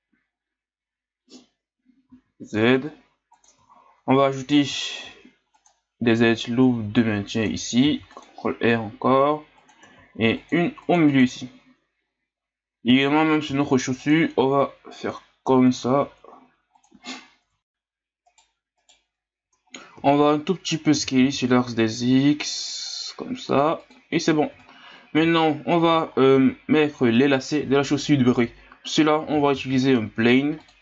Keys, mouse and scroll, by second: 3.7-4.1 scroll down 3, 4.1-5.0 scroll up 2, 5.0 ctrl+r, 7.8 ctrl+r, 11.1-13.5 drag, 13.5 ctrl+r, 17.4 Tab, 18.3 right click, 18.8 right click, 19.4 Tab, 20.9 s, 24.5 Tab, 25.1 a, 25.5 scroll down 2, 26.1-29.1 scroll up 1, 29.5 shift+a.